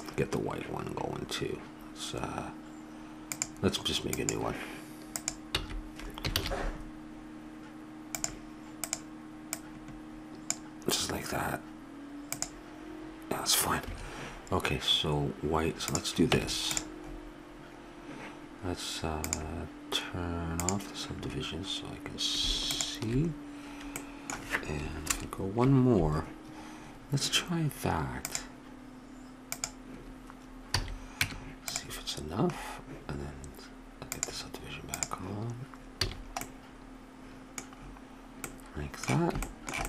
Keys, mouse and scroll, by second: 3.2-6.3 drag, 5.5 x, 6.3 shift+a, 9.5-11.5 drag, 12.3-14.2 drag, 15.9-17.5 drag, 16.3 Tab, 19.3-20.9 drag, 24.0 click, 25.1 ctrl+KP_Add, 30.7 a, 31.1 click, 31.2 Tab, 31.4 middle click, 34.1 click, 36.1 a.